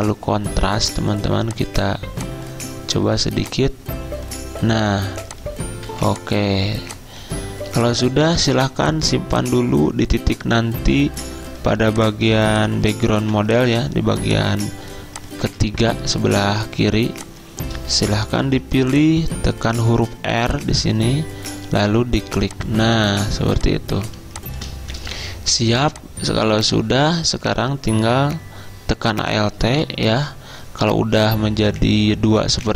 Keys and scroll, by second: 5.9 z, 8.5 v, 11.8 z, 13.2 typing, 15.5 z, 18.3 v, 23.5 z, 25.0 typing.